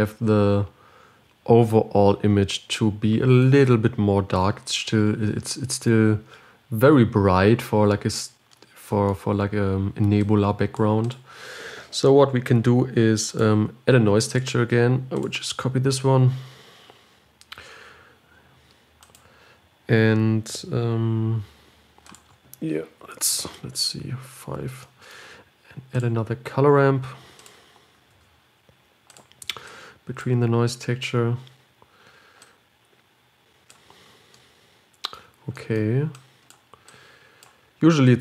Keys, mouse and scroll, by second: 3.8 click, 7.2-7.8 scroll down 1, 7.8-8.3 scroll up 4, 10.5-17.3 drag, 18.4 shift+d, 21.1-21.6 scroll up 1, 26.5 click, 27.8 click, 28.5 shift+d, 30.0-38.2 drag.